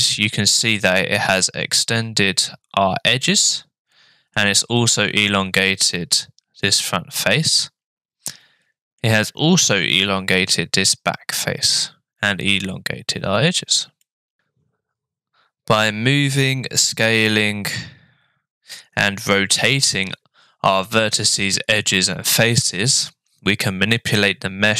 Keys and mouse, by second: 4.0 middle click, 6.6-9.0 middle drag, 14.0 middle click.